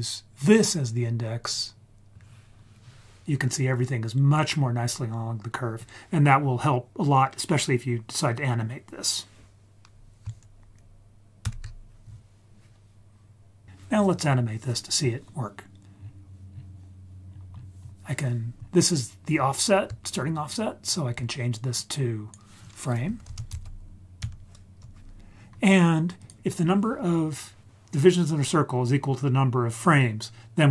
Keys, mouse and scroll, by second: 0.9-4.5 scroll up 5, 4.5-5.1 scroll down 4, 11.4 ctrl+s, 15.9-16.5 scroll down 1, 16.5-17.2 scroll down 3, 17.2-17.9 scroll up 5, 18.6-19.6 scroll down 1, 20.4 ctrl+right click, 21.7-24.8 drag, 26.2 click, 26.4-27.0 scroll down 3.